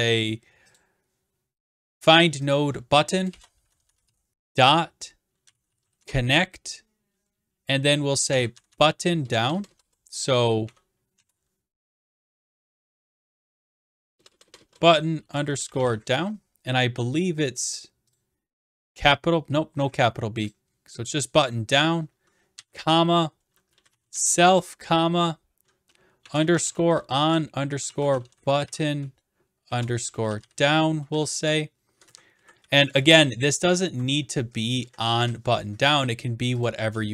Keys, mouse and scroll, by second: 0.2 click, 0.8-2.6 drag, 3.1-6.3 typing, 8.1-9.8 typing, 11.6-14.6 typing, 16.7 typing, 18.2 click, 20.5-21.6 drag, 21.8 click, 23.5-24.8 typing, 26.2-32.0 typing, 32.0 Left, 32.1 Right, 32.4 Right, 32.6 Delete, 32.9-33.9 Left, 34.8 Right, 36.9 shift+click.